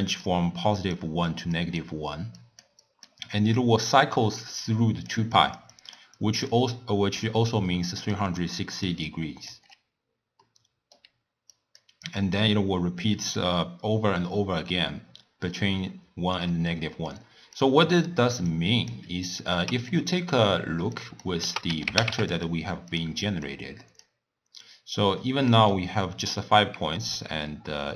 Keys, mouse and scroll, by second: 0.0-9.6 typing, 0.0 click, 0.8 click, 1.6 click, 2.4 click, 2.9 click, 4.6 click, 5.4 click, 5.8 click, 6.2 click, 7.6 click, 8.4 click, 8.8 click, 9.1 click, 10.4 middle click, 11.1 d, 11.6 click, 11.8 d, 12.2-13.4 drag, 13.4-16.4 d, 16.8-17.6 middle drag, 17.6 click, 18.5 drag, 19.9-21.0 middle drag, 21.0 click, 21.4 ctrl+a, 23.5 drag, 24.6-25.8 drag, 25.8-27.4 middle drag, 27.4-27.7 scroll up 2, 27.7-27.9 scroll down 2.